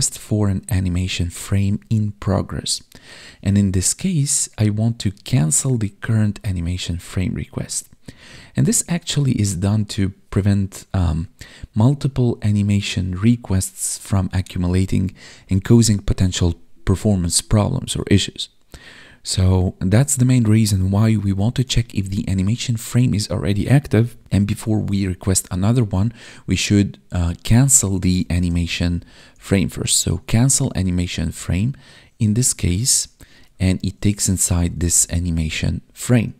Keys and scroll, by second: 30.3 Tab, 35.1 Tab, 35.8 Right.